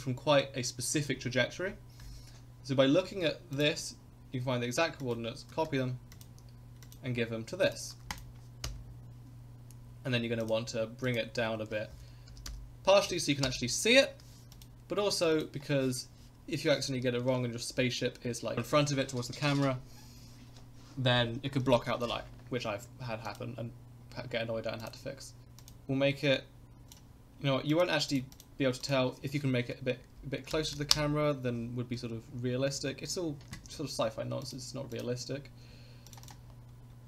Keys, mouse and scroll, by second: 3.5 click, 4.1 ctrl+z, 5.0-6.2 drag, 6.8 click, 7.6 ctrl+click, 8.6 KP_0, 10.4-18.6 drag, 23.2 click, 24.8 click, 25.6 click, 26.9 click, 27.7 click, 28.3-31.6 drag, 31.9 s, 34.4-36.1 drag, 36.2 click.